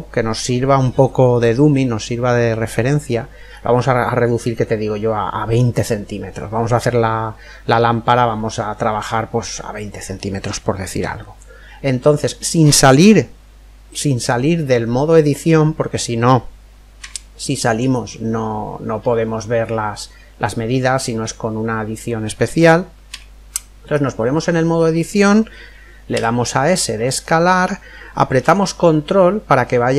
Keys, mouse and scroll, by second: 17.0 Tab, 23.1 Tab, 26.1 s.